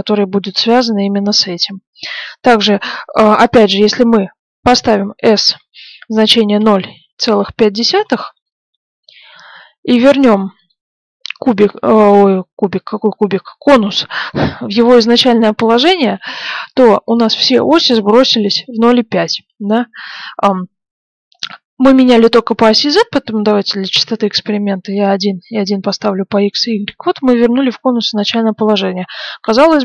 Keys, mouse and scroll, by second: 4.7 s, 9.8-11.6 middle drag, 21.2-22.7 middle drag, 22.7-24.5 drag, 24.5-26.9 drag, 27.4-29.7 middle drag.